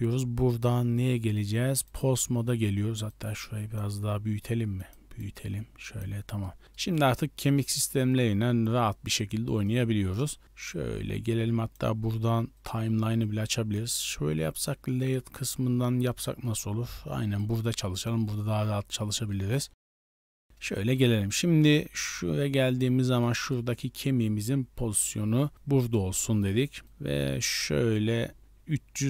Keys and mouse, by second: 0.6-2.0 drag, 3.0 click, 4.8 click, 5.2 click, 6.4-7.0 middle drag, 8.6 r, 10.6-11.7 drag, 12.6-13.8 drag.